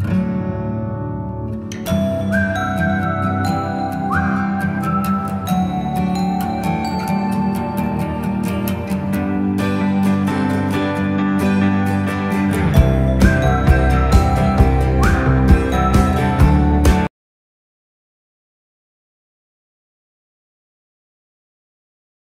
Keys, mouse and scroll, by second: 0.1 ctrl+=, 1.6 space, 1.8 click, 2.1 space, 2.5 space, 3.4 space, 4.1 click, 4.7 space, 5.9 ctrl+-, 7.4-8.9 drag, 9.5 click, 10.5-12.7 alt+shift+drag, 13.7-15.6 drag, 16.1 click.